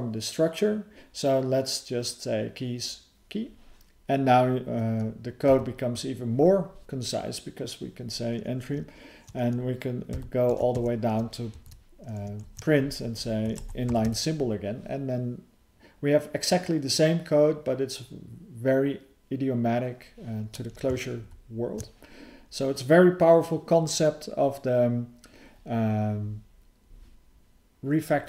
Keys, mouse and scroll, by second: 10.7 Tab, 11.5 alt+f, 21.2 ctrl+_.